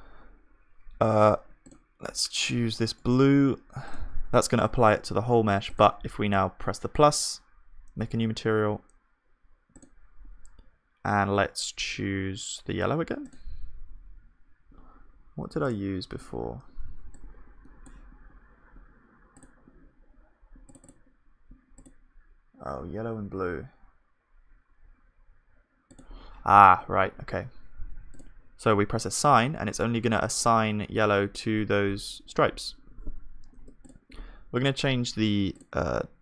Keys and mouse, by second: 4.7-7.9 drag, 10.1-13.3 drag, 33.6 Tab.